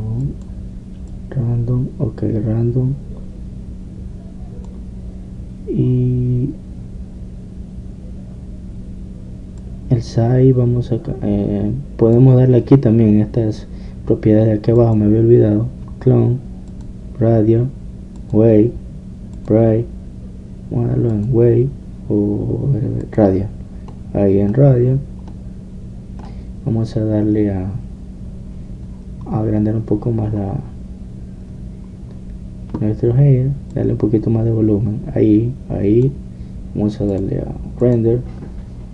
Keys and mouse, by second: 1.3-4.1 drag, 10.7-12.5 drag, 16.0-25.5 drag, 25.7-27.2 drag, 28.3-34.8 middle drag, 34.8-36.6 drag, 36.6-38.1 middle drag, 38.1 click.